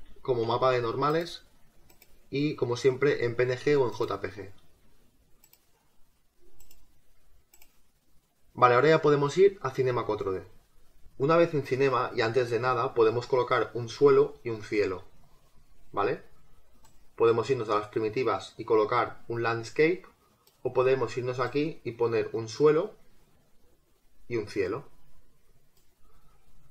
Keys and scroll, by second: 0.0-0.3 typing.